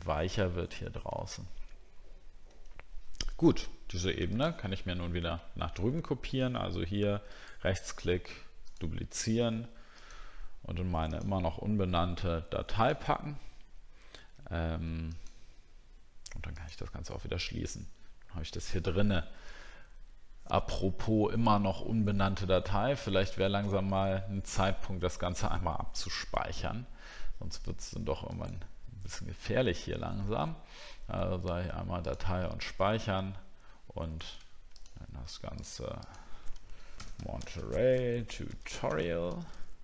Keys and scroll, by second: 0.0 alt+scroll up 1, 1.2 alt+scroll down 1, 37.4 shift+t.